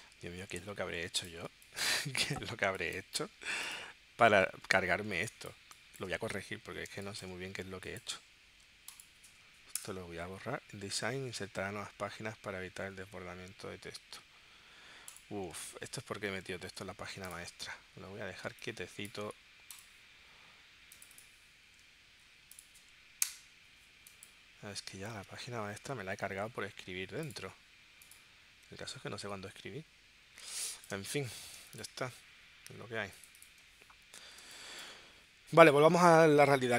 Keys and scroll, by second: 1.5 space, 5.2 space, 17.1 super+z, 18.5 space, 23.2 BackSpace, 25.0 super+z, 31.0 space, 31.6 space.